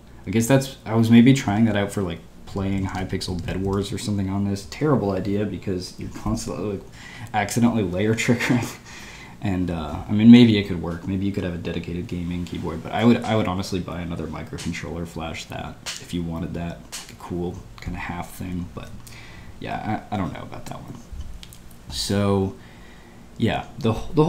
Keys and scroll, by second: 1.4 typing, 2.7-4.1 typing.